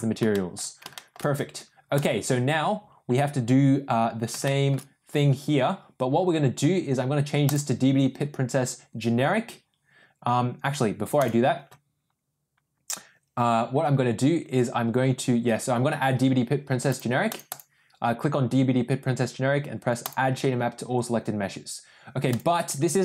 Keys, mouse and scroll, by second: 0.2 shift+middle drag, 0.9 shift+middle drag, 4.4 shift+middle drag, 7.4 click, 11.1 click, 17.3 click, 17.5 click, 20.0 drag.